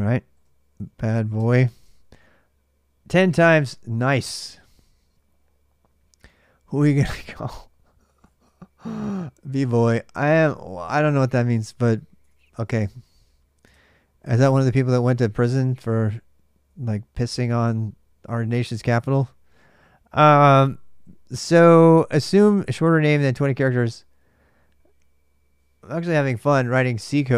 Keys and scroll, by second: 0.0-1.4 typing, 1.5 Return, 7.6-8.4 typing, 13.4 super+Tab, 13.7 Delete.